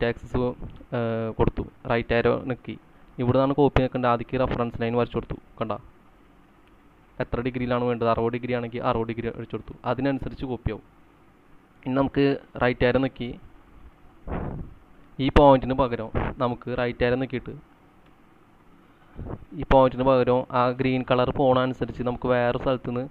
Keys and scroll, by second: 8.4-8.7 typing, 9.0 Return, 9.8-11.3 typing, 12.7 Right, 16.1 Escape, 18.1 Right.